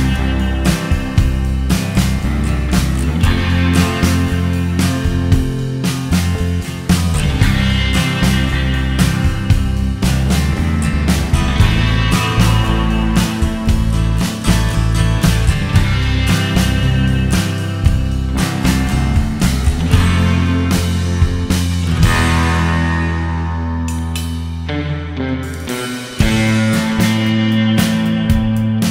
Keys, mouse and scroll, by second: 12.1 click, 13.7 click, 18.2 click, 18.2 middle click, 21.8 click, 22.7 click, 23.2 click, 23.8 click, 24.6 click, 26.9 click, 27.2-28.9 scroll down 10.